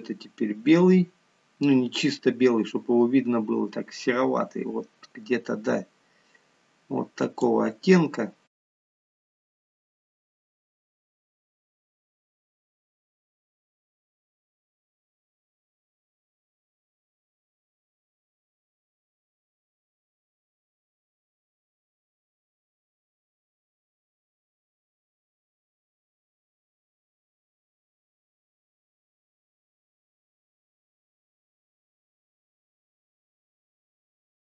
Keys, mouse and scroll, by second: 8.5 click, 8.8 click, 8.9 click, 9.1 click, 9.5-9.9 ctrl+z, 10.3 click, 10.7 click, 11.5 click, 12.4 click, 12.7 click, 12.9 click, 14.0 click, 15.1 click, 15.3 shift+middle click, 15.4 scroll up 3, 15.5 middle click, 15.7 click, 16.1 click, 17.1 click, 18.4 click, 18.6 click, 18.9 a, 19.2 click, 19.4 click, 19.7 click, 20.4 click, 20.7 click, 21.5 click, 21.7 click, 22.2 click, 22.5 click, 23.1 click, 23.4 click, 24.0 click, 24.1 click, 24.5 click, 24.9 click, 25.4 middle click, 25.5 scroll down 3, 25.8 scroll up 7, 26.1 shift+click, 26.5 KP_7, 26.8 shift+d, 27.1 click, 27.3 click, 27.6 ctrl+z, 27.9 ctrl+z, 28.2 click, 28.4 shift+click, 28.6 click, 28.7 scroll down 4, 29.0 shift+click, 29.5 shift+d, 30.3 click, 30.4 click, 30.5 click, 30.7 Delete, 31.0 click, 31.3 click, 31.5 shift+click, 31.6 shift+click, 31.7 shift+click, 31.8 shift+click, 32.0 shift+click, 32.1 shift+click, 32.2 shift+click, 32.3 shift+click, 32.7 click, 33.0 click, 33.9 click.